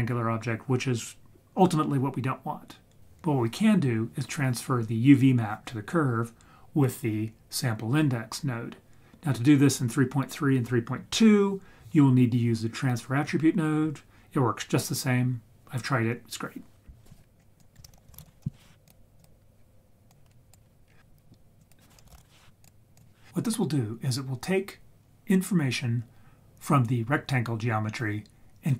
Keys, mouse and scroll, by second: 17.4 scroll up 1, 17.6 click, 17.8 shift+a, 20.1 click, 20.8-21.4 scroll up 4, 21.6-22.9 drag.